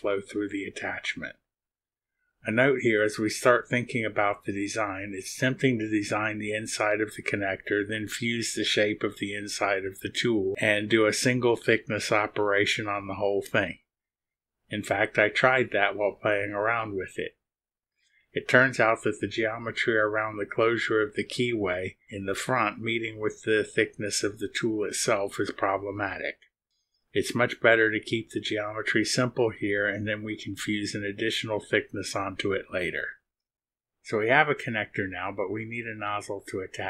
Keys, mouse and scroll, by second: 33.8 click.